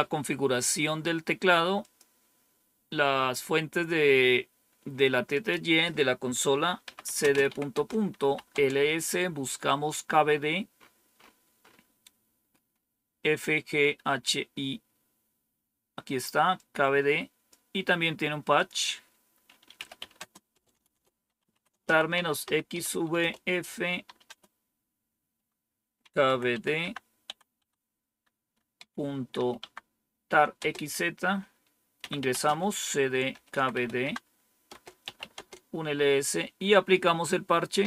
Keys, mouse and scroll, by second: 1.7 click, 5.2 click, 6.5-8.6 typing, 13.3-14.2 scroll down 3, 16.5 click, 18.0-24.0 typing, 18.2 click, 18.5 click, 25.9-30.5 typing, 31.7-35.4 typing.